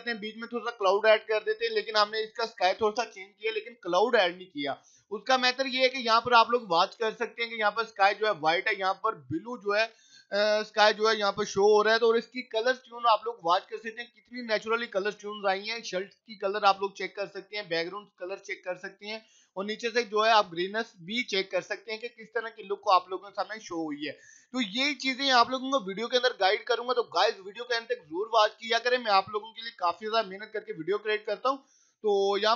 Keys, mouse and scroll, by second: 14.3 scroll up 1, 15.8 click, 16.1-17.1 scroll up 1, 17.1-17.8 scroll down 1, 18.0 click, 18.3 scroll down 1, 18.9 scroll down 1.